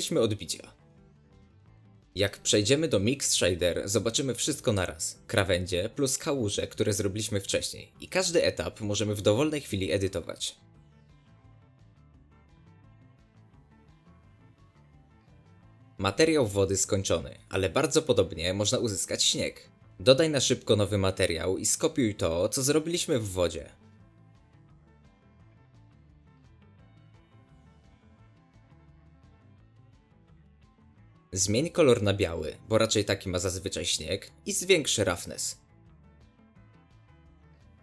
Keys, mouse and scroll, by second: 0.2-6.0 drag, 6.7 scroll up 1, 6.8-7.3 shift+middle drag, 7.3-8.5 scroll down 2, 8.5 shift+click, 10.1 scroll down 1, 10.3 shift+middle click, 10.4-11.3 scroll up 2, 10.6 shift+middle click, 11.3-13.1 shift+drag, 14.7 click, 16.5 scroll down 4, 16.6-17.3 middle drag, 17.3 scroll up 1, 17.5-21.3 shift+middle drag, 21.7 click, 22.1 click, 22.2-24.0 drag, 24.4 scroll down 1, 25.3 click, 27.2 click, 28.4 x, 28.7 ctrl+v, 29.5 Tab, 30.3 click, 30.7 Tab, 32.9 click, 34.3 click, 36.9-37.8 drag.